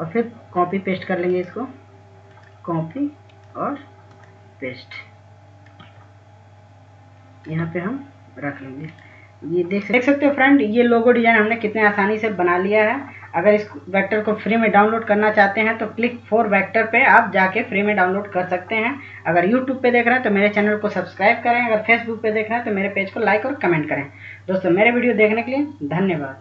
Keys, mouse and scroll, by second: 0.2 right click, 0.8 click, 5.5-12.6 drag.